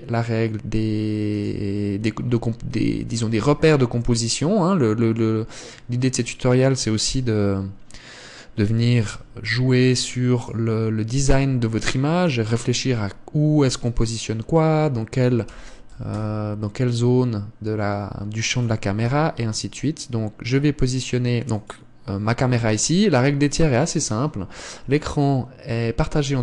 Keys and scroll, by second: 3.9 g, 9.6 g, 11.7 g, 16.0 r, 19.6 g.